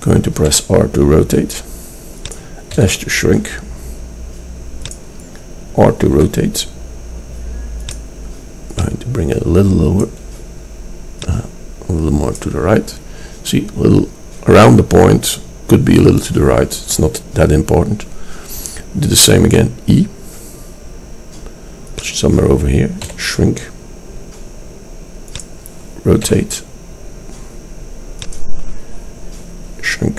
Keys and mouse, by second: 0.6 r, 2.8 s, 6.2 r, 8.8 click, 19.7 e, 23.1 s, 26.3 r.